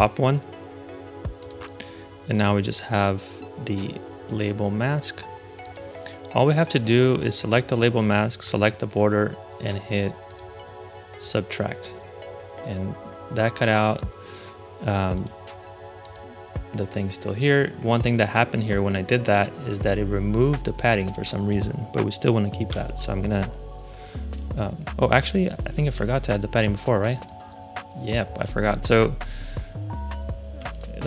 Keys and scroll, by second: 22.6 8, 25.7 super+z.